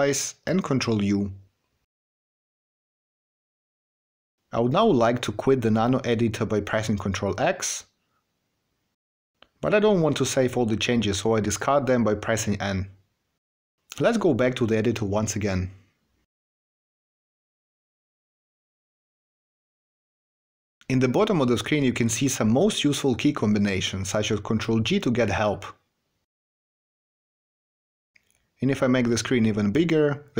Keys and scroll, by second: 1.4 ctrl+u, 6.4 ctrl+x, 10.1 n.